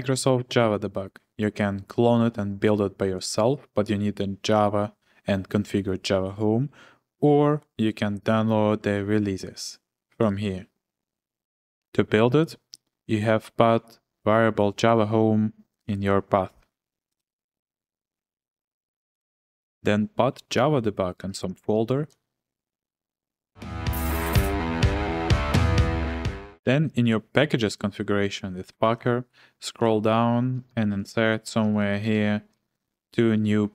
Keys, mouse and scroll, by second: 8.2 click, 10.2 click, 20.9-22.1 typing, 28.8 ctrl+f, 30.4-32.5 typing.